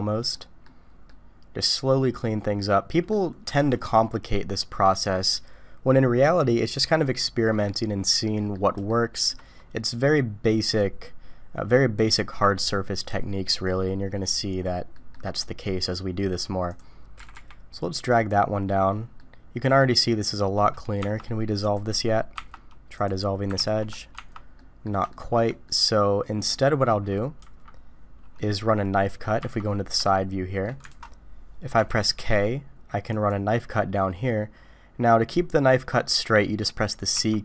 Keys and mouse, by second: 0.3 middle click, 1.1-3.1 middle drag, 3.5 alt+a, 8.2 middle click, 8.9 shift+middle click, 14.9 middle click, 17.2 g, 19.2 middle click, 21.0 Tab, 21.6 click, 22.3 Tab, 23.6 ctrl+x, 24.1 Tab, 24.6 click, 25.1 shift+click, 25.6 middle click, 27.4 KP_3, 28.4 middle click, 30.1 shift+middle click, 30.9 alt+a, 31.7 k.